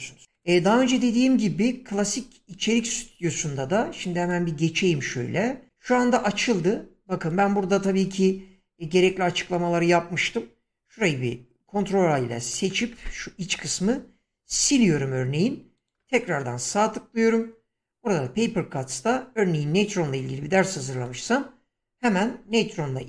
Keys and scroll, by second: 11.7 ctrl+a, 14.4 Delete.